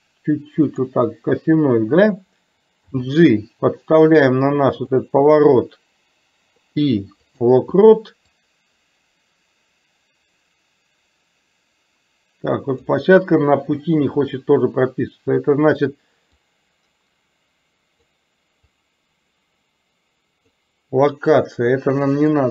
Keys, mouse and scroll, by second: 2.9 g, 6.6 i, 8.4-12.9 drag, 16.4-18.2 drag, 18.7-20.6 drag.